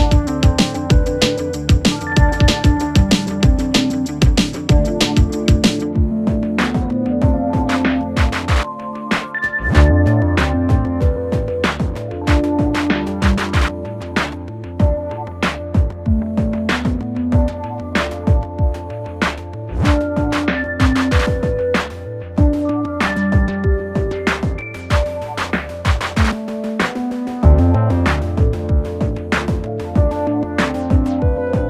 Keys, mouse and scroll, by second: 3.7 click, 10.8-12.2 typing, 12.9 click, 13.8 Return, 15.4 click, 23.3 space, 25.7 space, 27.0-31.6 click.